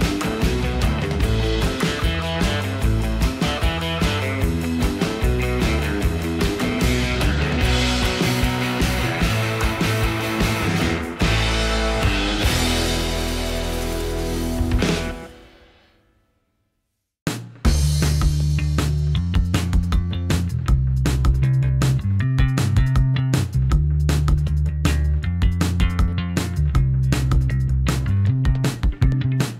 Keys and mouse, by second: 0.3-1.0 middle drag, 1.9 click, 2.1 click, 2.5 middle click, 3.6 click, 4.5 click, 5.5 middle click, 6.9 click, 7.1 middle click, 8.3 middle click, 9.1 ctrl+r, 10.2 middle click, 10.9 s, 11.0 x, 12.7 click, 13.4 2, 14.0 click, 15.1-16.0 middle drag, 16.3 e, 18.4 click, 18.6-21.8 middle drag, 22.4 shift+middle click, 22.8 middle click, 24.2 click, 24.8 g, 25.1 x, 26.3 shift+click, 26.7 shift+middle click, 26.8 ctrl+KP_3, 27.1 shift+middle drag, 27.8 g.